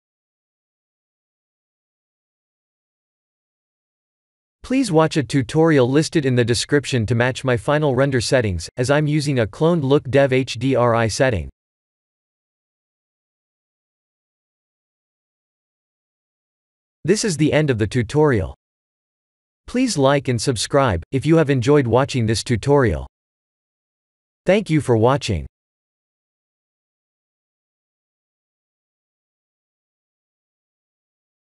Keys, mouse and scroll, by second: 0.1 shift+click, 6.1 click, 14.7 ctrl+s, 15.2 click.